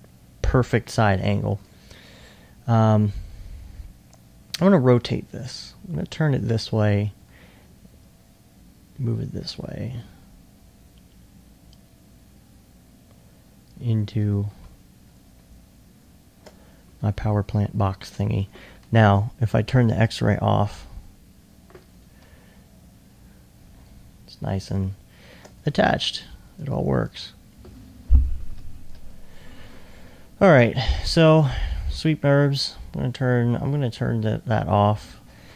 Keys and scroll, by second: 4.6 r, 7.2 e, 8.3 e, 14.6 2, 16.2 alt+2, 16.9 alt+1, 17.5-18.3 typing, 28.5-28.9 typing.